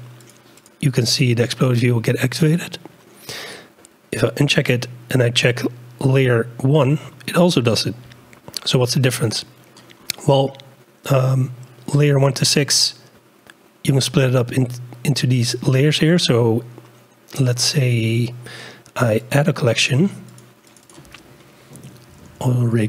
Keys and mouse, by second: 1.8 click, 2.5 click, 4.5-8.4 drag, 17.4 click, 17.8 click, 20.3 click, 21.0-22.0 drag, 22.0-22.8 shift+middle drag.